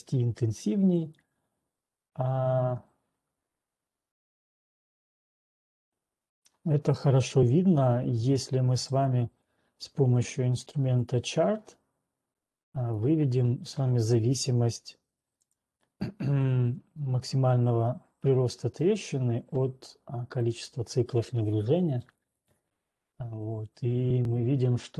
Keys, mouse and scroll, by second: 0.0 right click, 0.5 scroll, 2.9 scroll down 9, 9.5 click, 11.5 click, 13.0 click, 15.5 ctrl+1, 15.5 click, 18.9 click, 20.5 click.